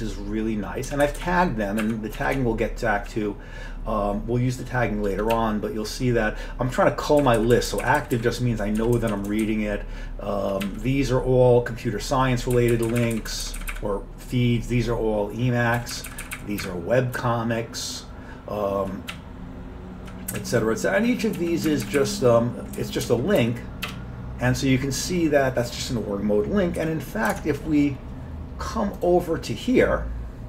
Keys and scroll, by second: 0.9 Up, 1.1 Up, 1.2 Up, 1.9 Up, 2.2 Down, 2.4-3.1 Down, 5.4 Down, 5.9 Down, 5.9 Down, 7.2 Up, 7.4 Up, 7.6 Up, 7.7 Up, 8.8 Down, 9.0 Down, 9.1 Down, 9.3 Down, 10.7 Down, 12.6 Up, 12.7 Up, 12.9 Up, 13.0 Up, 13.2 Up, 13.5 Up, 13.6 Up, 15.8 Up, 16.0 Up, 16.1 Up, 16.3 Up, 16.4 Up, 16.7 Up, 17.2 Down, 17.8-18.8 Down, 18.8-20.1 Down, 20.4-21.0 Down, 21.4 Down, 21.7 Up, 21.9 Up, 22.0 Up, 22.8 Down, 23.1 Left, 23.5 Up, 23.9 BackSpace, 26.8 1, 27.4 alt+Tab.